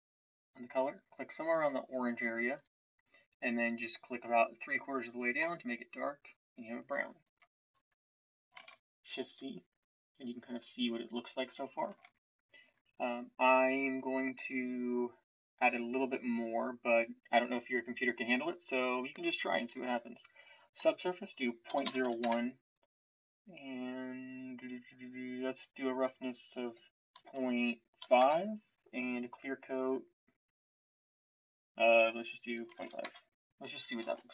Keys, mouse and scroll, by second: 8.6 shift+z, 11.9 shift+z, 34.0 shift+z.